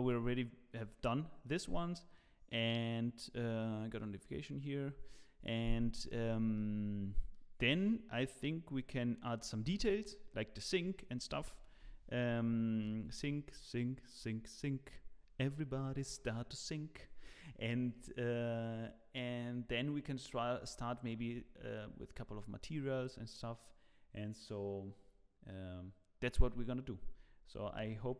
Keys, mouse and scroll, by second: 1.4 middle click, 6.5 middle click, 11.8 KP_7, 12.8 z, 13.7 shift+middle click, 14.5-14.9 scroll up 1.